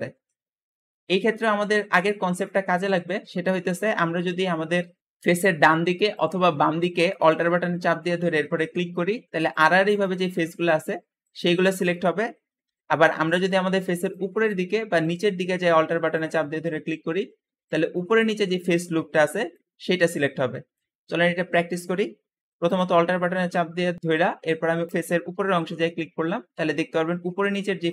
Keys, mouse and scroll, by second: 0.1 Escape, 0.5-1.2 scroll up 3, 1.8 scroll down 1, 2.1-20.9 shift+middle drag, 3.2 `, 12.5 r, 12.5 r, 15.6 `, 20.9 Escape, 22.5 click, 24.8 alt+click, 26.0-26.8 alt+scroll down 3.